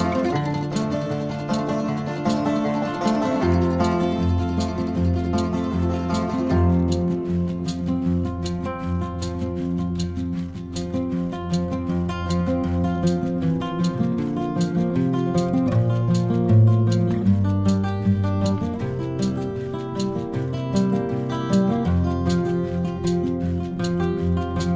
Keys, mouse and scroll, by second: 0.1 shift+click, 1.0 ctrl+p, 2.7 click, 3.7 shift+click, 4.3 shift+click, 5.0 shift+click, 7.0 ctrl+p, 9.2 KP_3, 10.4-11.4 drag, 15.2-16.2 shift+middle drag, 18.4 click, 19.6 click, 22.1 click.